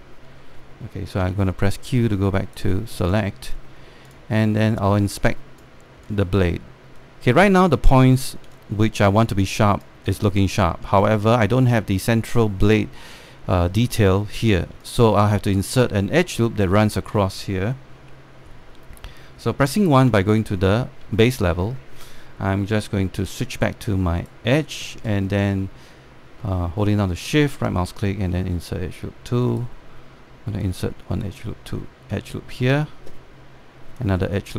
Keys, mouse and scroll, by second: 0.5 alt+middle click, 1.9 alt+q, 2.4 right click, 3.6 click, 4.4-4.7 scroll down 1, 4.7 click, 5.7 space, 7.0-8.6 alt+drag, 9.2 alt+click, 10.7 alt+click, 11.8 alt+click, 15.4 alt+click, 18.6 1, 20.7 typing, 21.5 scroll up 1, 21.8 alt+middle click, 24.0-26.7 right drag, 27.9-31.3 shift+right drag, 31.3-34.5 drag.